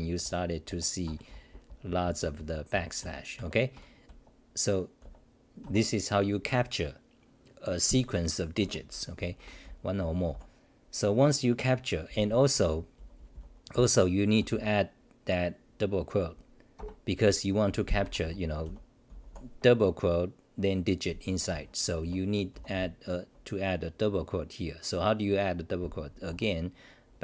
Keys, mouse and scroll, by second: 13.0 BackSpace, 21.5 t.